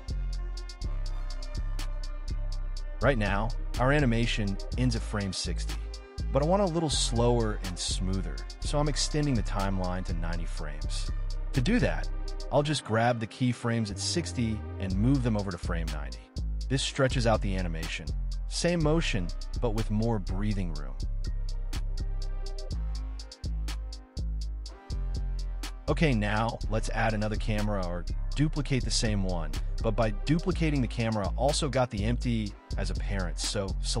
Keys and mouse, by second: 1.5 space, 3.9 space, 5.7 space, 7.6 space, 9.6 space, 12.1 space, 13.1 click, 13.6 click, 14.3 g, 15.7 click, 16.0 click, 16.3 g, 17.3 space, 19.9 middle click, 20.3 click, 20.9 click, 21.8 g, 22.8 KP_0, 23.2 shift+Left, 23.4 space, 24.2 space, 25.5 middle drag, 26.2-26.5 middle drag, 28.7 shift+d, 29.5 x.